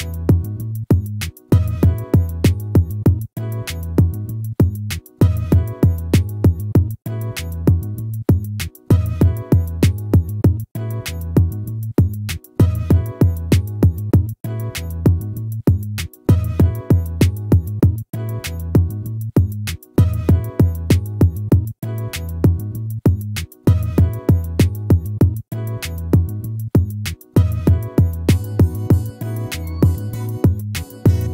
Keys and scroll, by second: 26.5 ctrl+-, 30.9 ctrl++.